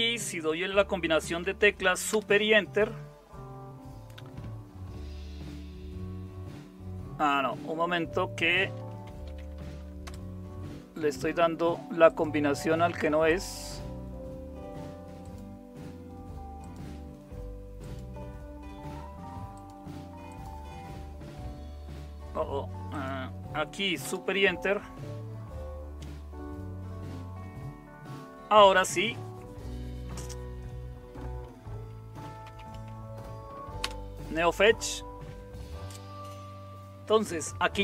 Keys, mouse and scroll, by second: 2.1 super+Return, 8.8-10.0 typing, 24.0 super+Return, 31.9-33.0 typing, 33.8 Return.